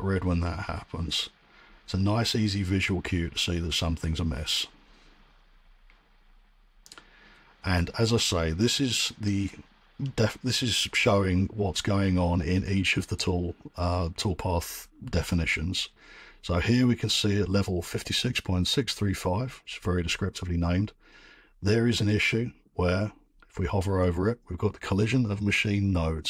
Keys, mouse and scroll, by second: 8.3 middle click, 8.6-9.3 scroll.